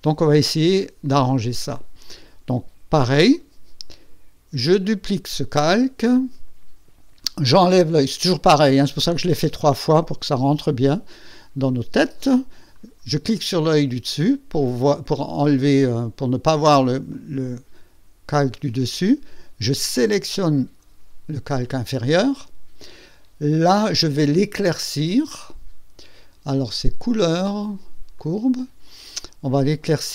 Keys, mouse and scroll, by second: 4.8 click, 12.7 click, 16.5 click, 17.0 click, 17.5 click, 20.5 click, 26.9 click, 28.1 click.